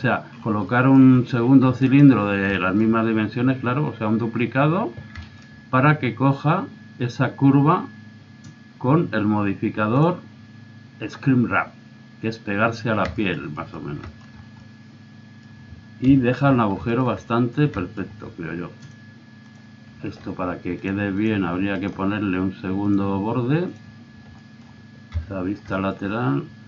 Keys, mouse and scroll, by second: 0.6 middle click, 1.4 click, 1.8-3.5 right drag, 4.0 middle click, 4.9-5.3 scroll up 1, 5.4-7.1 middle drag, 10.0-11.8 drag, 13.2 middle click, 14.9 middle click, 16.0 KP_3, 19.5 click, 20.8 click, 21.5-23.1 right drag, 21.7-22.8 drag, 22.9 click, 23.6 click, 24.3 middle click, 24.6 click, 25.1 KP_3.